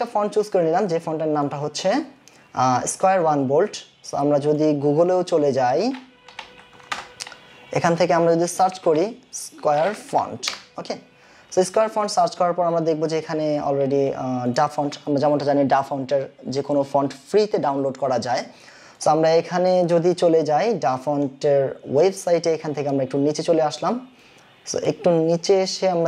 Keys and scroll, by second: 6.2-7.3 typing, 8.7-9.7 typing.